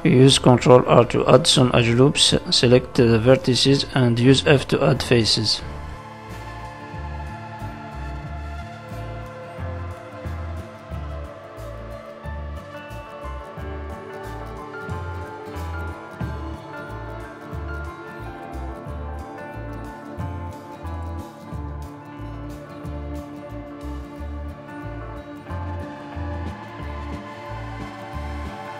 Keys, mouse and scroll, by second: 1.1 shift+middle click, 2.5 ctrl+r, 4.2 click, 4.8 shift+click, 6.1 shift+click, 6.6 f, 7.1 click, 7.8 click, 8.3 shift+click, 8.9 shift+click, 9.5 f, 10.8 right click, 11.8 ctrl+z, 13.0 ctrl+r, 14.7 click, 15.2 shift+click, 15.8 shift+click, 16.2 shift+click, 16.8 f, 17.7 click, 18.1 shift+middle click, 18.7 click, 19.1 shift+click, 19.7 shift+click, 20.2 shift+click, 20.6 f, 20.7 middle click, 21.4 click, 21.9 shift+click, 22.7 shift+click, 22.7 middle click, 23.5 shift+click, 23.9 middle click, 24.7 f, 25.1 middle click, 25.9 click, 26.4 shift+click, 26.9 shift+click, 27.6 shift+click, 28.1 f, 28.5 click.